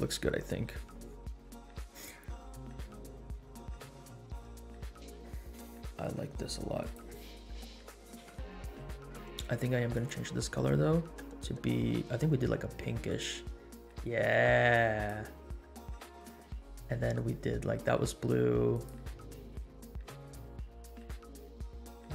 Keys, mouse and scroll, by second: 5.2 scroll up 1, 5.7-6.0 shift+middle drag, 6.7 click, 8.1 KP_Decimal, 9.9 click, 16.1 click, 18.7 click.